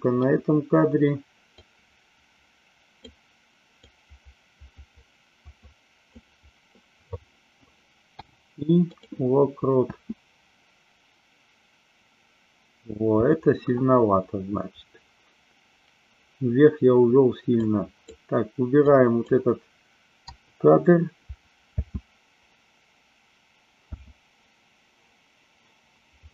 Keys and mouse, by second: 1.7-3.0 drag, 3.9-6.1 drag, 9.9 space, 13.2 space, 17.6 click, 18.9 click, 20.3 Delete, 21.7 space.